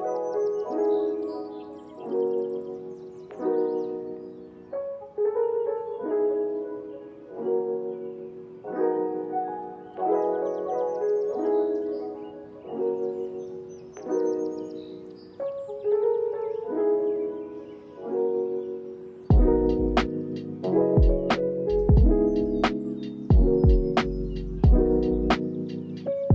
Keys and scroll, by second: 0.8 space, 2.7 ctrl+s, 4.9 s, 7.3 u, 9.1 x, 12.4 ctrl+s, 12.8 z, 22.2 x, 26.2 shift+p.